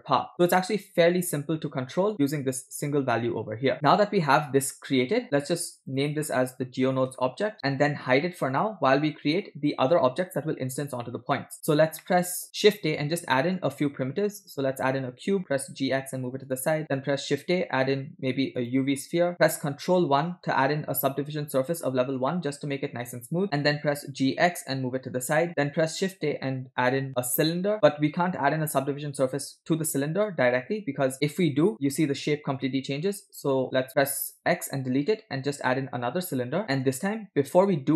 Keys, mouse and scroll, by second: 5.8 click, 6.0-7.5 drag, 8.5 click, 9.3 click, 11.1 scroll down 1, 11.3 middle drag, 11.7 scroll down 1, 12.0-12.4 shift+middle drag, 12.5 shift+a, 15.4 g, 17.0 shift+a, 20.0 ctrl+1, 20.9-21.8 scroll up 5, 22.0 scroll down 1, 22.3-22.7 shift+middle drag, 23.6 scroll down 1, 23.9 g, 25.8 shift+a, 28.3 scroll up 4, 31.7 ctrl+1, 34.3 shift+x, 34.5 shift+a.